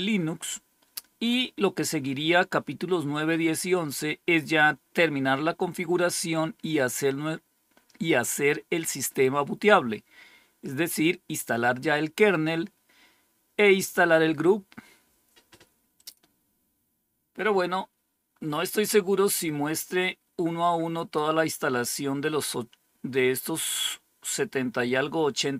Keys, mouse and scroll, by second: 0.4 scroll down 2, 15.9 click, 17.6-19.8 scroll up 4, 19.8-20.5 scroll up 1, 20.7-21.5 scroll up 2.